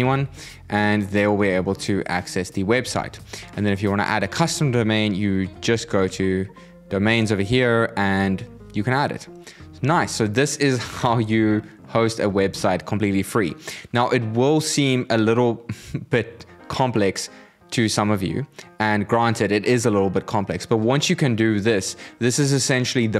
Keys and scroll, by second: 2.8 super+w.